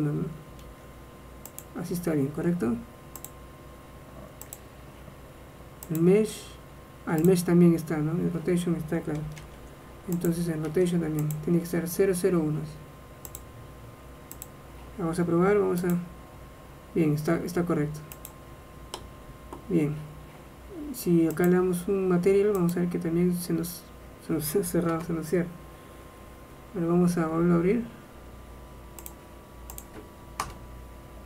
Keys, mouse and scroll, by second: 0.7 ctrl+a, 1.6-5.1 drag, 6.0-9.2 drag, 9.5 ctrl+a, 10.8 ctrl+a, 13.4 click, 16.0 click, 17.6 click, 18.4 click, 19.2 middle click, 21.5 click.